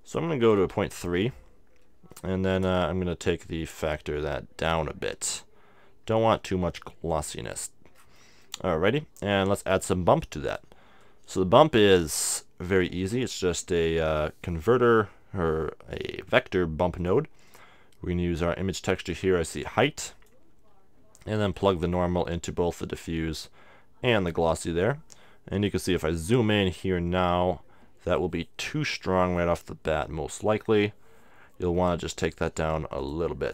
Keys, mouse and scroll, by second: 2.2-4.1 middle drag, 3.3-5.1 drag, 8.1-9.3 middle drag, 9.3-13.6 drag, 9.3 right click, 12.9 shift+a, 17.6-20.8 drag, 21.7-23.3 drag, 23.5-25.1 drag, 25.6 middle click, 26.0-28.9 middle drag, 33.0-33.5 drag.